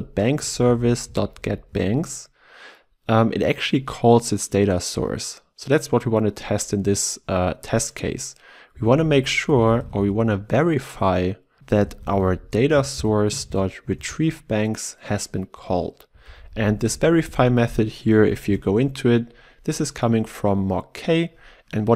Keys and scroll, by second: 0.8 ctrl+w, 11.6 Return, 18.7 ctrl+b.